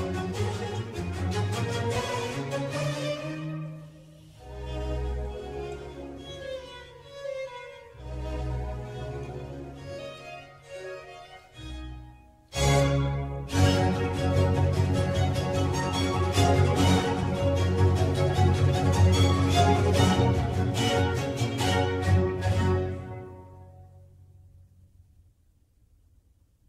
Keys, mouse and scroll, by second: 3.3 ctrl+r, 9.5 click, 10.2 ctrl+r, 16.6 click, 16.9-20.0 middle drag, 22.3-23.8 middle drag, 23.8 ctrl+z, 24.4 ctrl+z, 24.8-25.9 middle drag, 25.9 ctrl+z, 26.3 ctrl+z.